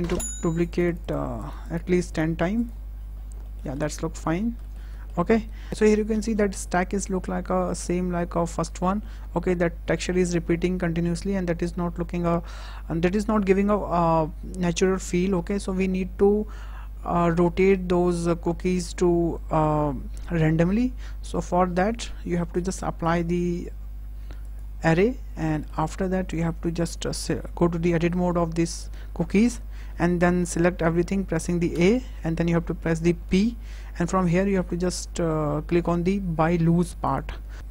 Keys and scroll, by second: 28.1 Tab, 31.6 a, 33.1 p.